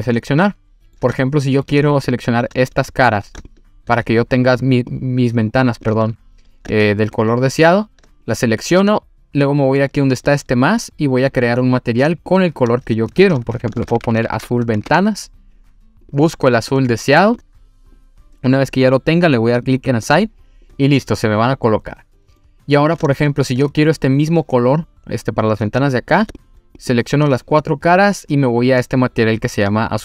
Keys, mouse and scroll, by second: 0.5 middle click, 1.2 shift+middle click, 2.0 click, 2.7 click, 3.5 shift+click, 4.1 click, 4.5 click, 4.9 click, 5.5 scroll up 2, 5.9 click, 7.1 shift+click, 10.1 click, 11.3 click, 12.3-14.9 drag, 16.0 click, 20.1 click, 20.6 click, 21.8-22.4 scroll down 2, 22.4 middle click, 23.2 shift+middle click, 25.4 click, 25.9 shift+click, 29.6 click.